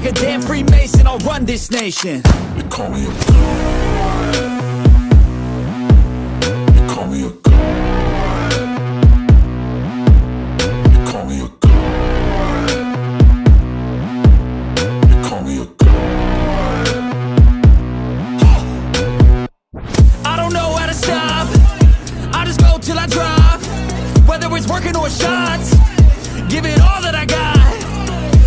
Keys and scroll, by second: 0.0-0.1 typing, 1.7 6, 2.7 0, 2.8 Return, 4.1 4, 4.6 0, 5.4 Return, 7.0 6, 7.3 5, 8.1 Return, 9.0 1, 9.4 Return.